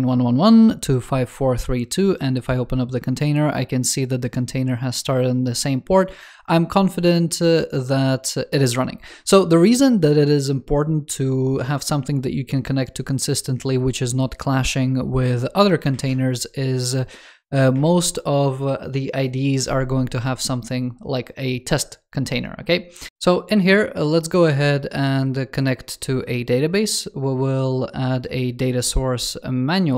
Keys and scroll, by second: 17.6 super+7.